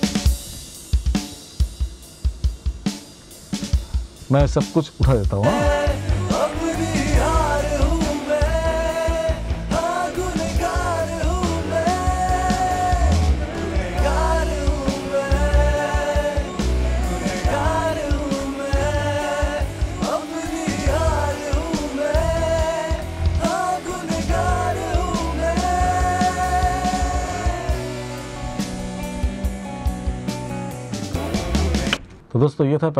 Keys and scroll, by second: 31.4 space.